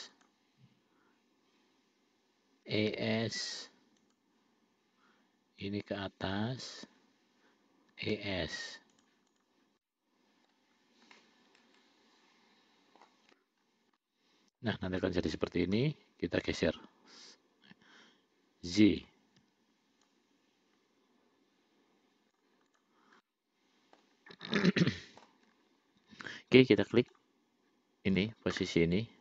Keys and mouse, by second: 3.0 e, 5.9-7.2 drag, 8.2 e, 9.6 click, 10.0 middle click, 11.5-13.3 middle drag, 14.3 middle click, 16.1 l, 17.0-19.4 drag, 19.7 y, 20.3-22.7 drag, 23.5 middle click, 25.0 middle click, 27.4 click.